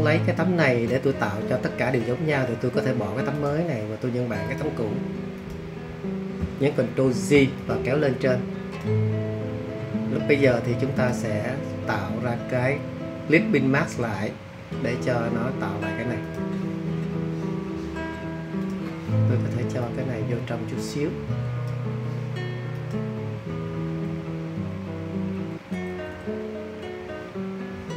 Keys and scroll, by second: 6.9 super+j, 24.1 Right, 25.7 Right, 25.9 Right, 26.1 Right.